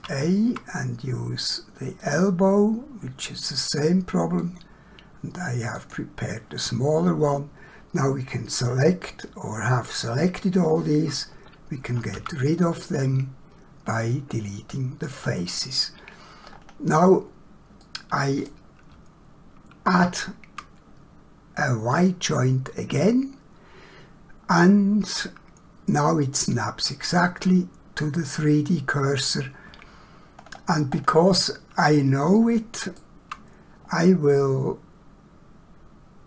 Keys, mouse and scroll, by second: 2.1 click, 4.5 click, 12.2 x, 15.1 click, 16.5 scroll up 1, 17.9 middle click, 19.9 shift+a, 22.0 click, 24.7 middle click, 30.4 scroll down 1, 31.0 scroll up 1, 32.4 shift+middle click.